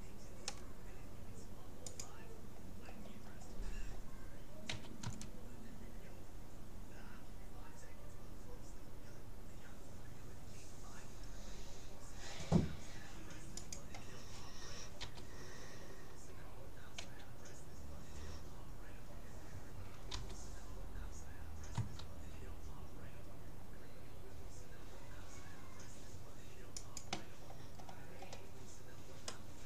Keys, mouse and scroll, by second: 3.0-5.0 middle drag, 4.7 s, 15.0 g, 27.8 middle click, 28.7-29.4 scroll down 1, 29.4-29.6 middle drag.